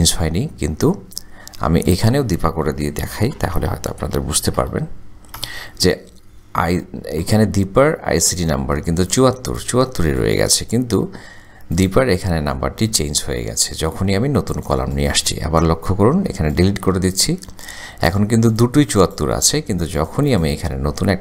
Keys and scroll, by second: 3.4-5.0 typing, 5.4 Return.